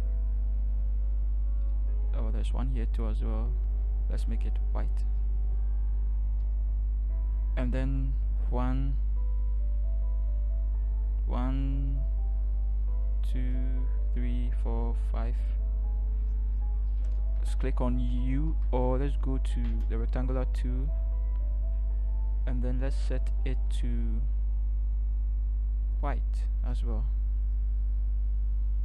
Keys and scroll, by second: 18.5 u.